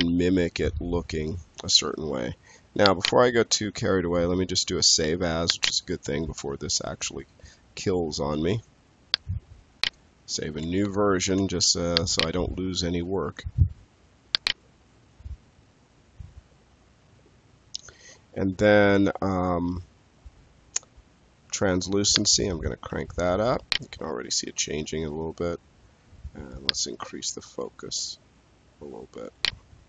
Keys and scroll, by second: 10.7 3.